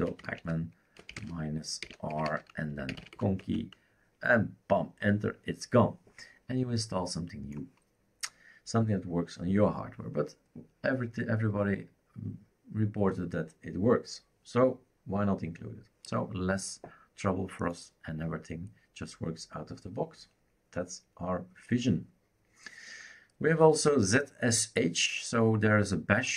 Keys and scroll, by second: 0.0-3.6 typing.